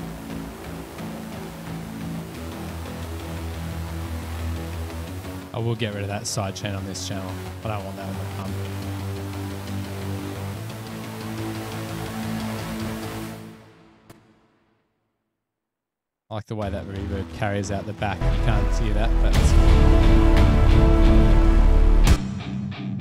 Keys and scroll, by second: 15.0-15.3 typing.